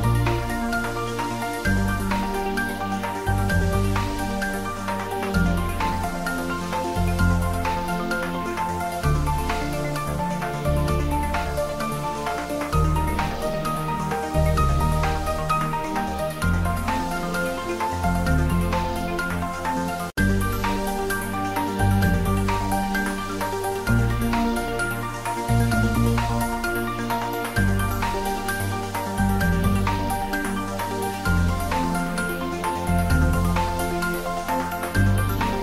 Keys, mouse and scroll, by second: 0.3 click, 3.7 click, 3.9-5.3 middle drag, 5.3 ctrl+r, 5.6 click, 6.9 Tab, 7.3 middle click, 8.4 Tab, 8.5 middle click, 9.1 ctrl+r, 9.6 click, 10.8 Tab, 11.4 shift+middle click, 11.9 Tab, 12.3 ctrl+r, 12.6 click, 13.8 Tab, 14.0 ctrl+middle click, 14.9-17.0 ctrl+middle drag, 17.0 shift+middle click, 17.8 ctrl+middle click, 18.1 Tab, 18.7 click, 19.7 middle click, 20.8 Tab, 20.9 middle click, 21.6 Tab, 22.2 click, 23.5 ctrl+r, 24.2 click, 24.6 Tab, 24.9-28.7 middle drag, 28.7 ctrl+middle click, 29.7 Tab, 30.7 shift+click, 31.6 shift+click.